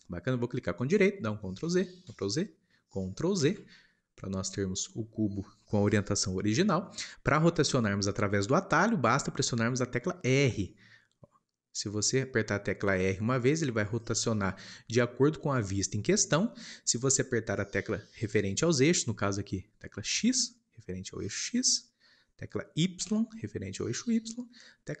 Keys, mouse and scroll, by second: 1.6 ctrl+z, 2.0 ctrl+z, 6.6-8.7 drag.